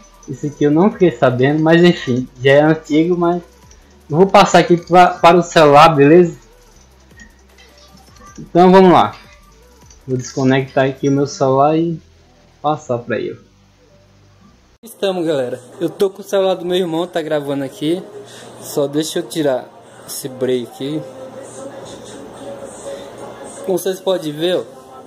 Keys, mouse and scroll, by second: 0.2 click, 0.5 drag, 0.8 drag, 1.1 click, 1.4 click, 1.7 click, 2.0 click, 2.3 click, 2.6 click, 2.9 click, 3.2 drag, 3.5 click, 9.4 click, 14.7 click.